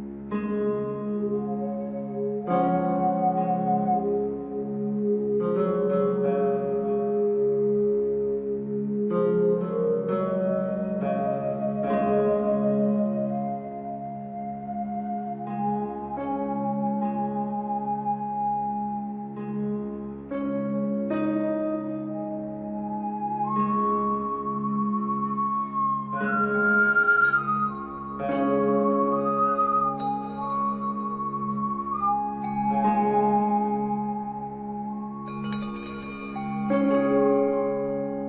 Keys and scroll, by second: 3.3 ctrl+a.